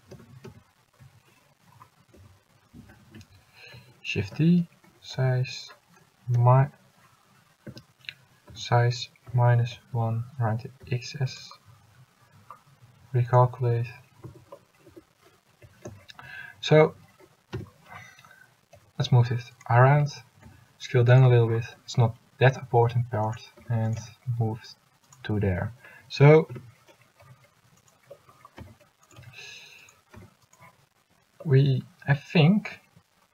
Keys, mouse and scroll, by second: 0.3 ctrl+z, 0.6 ctrl+z, 2.3 s, 4.4 shift+d, 8.6 s, 14.4 Tab, 15.0 Tab, 15.8 a, 16.0 a, 17.7 l, 18.9 g, 20.6 s, 21.9 g, 23.8 s, 24.2 g, 25.6 a, 26.6 l, 27.4 g, 28.7 s, 29.3 g, 30.3 s.